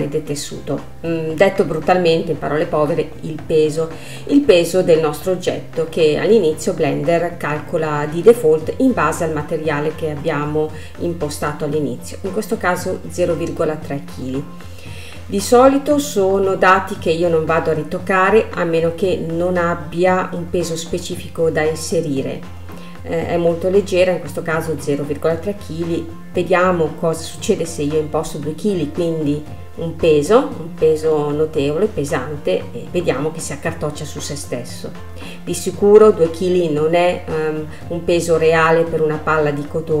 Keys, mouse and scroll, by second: 2.4-5.4 middle drag, 7.0-9.9 drag, 14.4 space, 17.3 space, 20.4-24.7 drag, 29.1-31.1 drag, 31.1 space, 32.8 middle click, 33.7-36.7 scroll up 1, 37.9-40.0 drag.